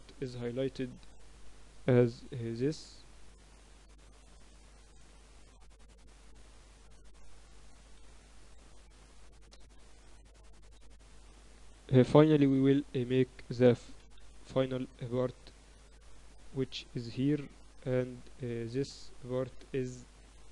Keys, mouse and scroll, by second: 0.1 b, 1.6-3.5 drag, 2.7 a, 3.1 b, 4.5-6.3 drag, 5.9 a, 8.6 g, 12.5 a, 13.3 b, 14.9 e, 18.2 KP_8, 18.9 z.